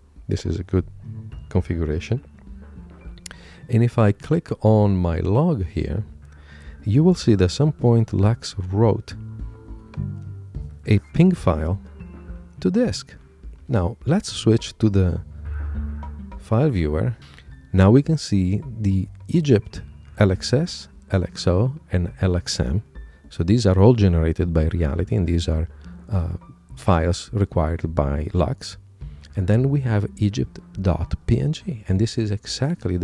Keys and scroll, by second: 14.8 super+Tab.